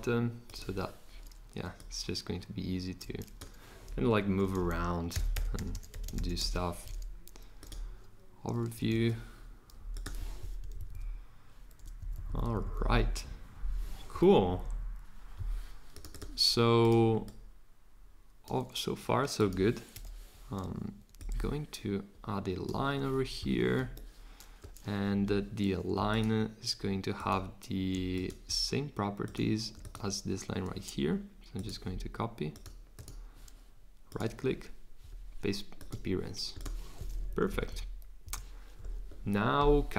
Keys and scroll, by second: 4.2 Return, 4.8-6.9 typing, 8.9 super+a, 10.6 shift+Up, 10.8 shift+Up, 10.9 shift+Up, 12.0 Down, 12.1 Down, 12.3 Down, 12.4 Down, 12.5 Down, 12.7 Down, 12.9 Down, 14.3 Down, 14.6 Down, 19.9 l, 23.7 Escape, 25.0 Escape, 37.3 Up, 37.5 Up, 37.7 Up, 38.2 Down.